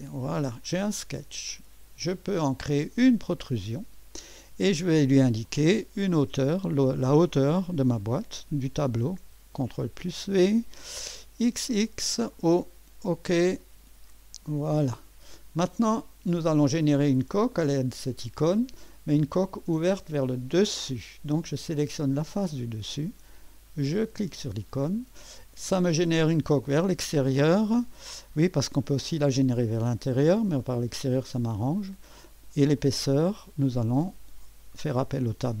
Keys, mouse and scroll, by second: 1.6-2.2 drag, 3.4 click, 5.5 click, 9.9 ctrl+v, 11.4 typing, 12.4 click, 18.9-19.6 drag, 21.8 click, 23.9 click, 26.4 right click, 28.9 click, 29.7 click, 30.6-31.1 scroll up 1, 31.1-32.8 scroll down 1, 32.8 click.